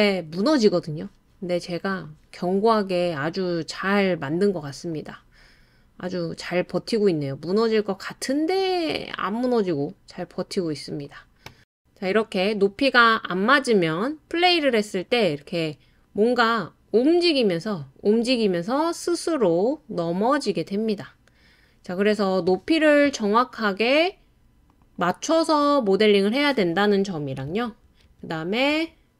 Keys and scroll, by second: 28.0 super+z, 28.3 super+z, 28.8 super+z.